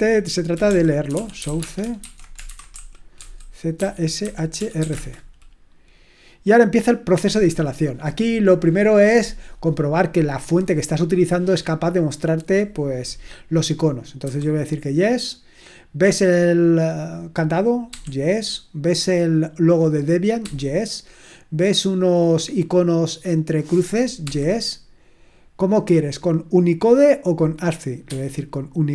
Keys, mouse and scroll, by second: 0.3-5.3 typing, 14.2 y, 17.9 y, 20.4 y, 24.2 y, 28.0 1.